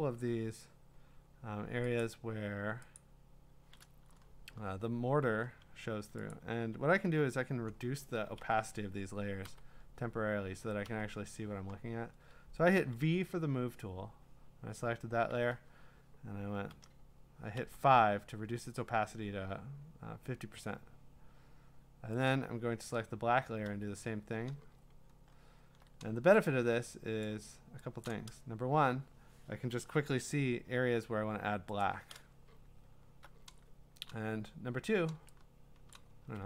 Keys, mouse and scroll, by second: 1.1-2.0 scroll down 4, 2.0 click, 2.4 scroll, 3.0 click, 5.2 b, 6.3 click, 6.6 v, 8.4 v, 9.5 4, 10.8 5, 15.1 v, 16.7-18.1 typing, 20.6 5, 22.3 click, 23.7 5, 24.9-25.5 scroll, 26.1 scroll, 26.7-28.1 scroll, 26.9 middle click, 27.2 click, 28.1-28.6 click, 31.8 click, 32.5-33.1 scroll, 35.9 click.